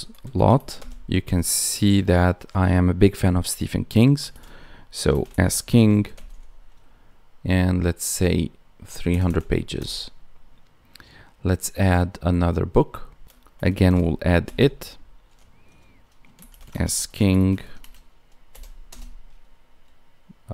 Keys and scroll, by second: 5.0 space, 16.6 space, 17.7 space.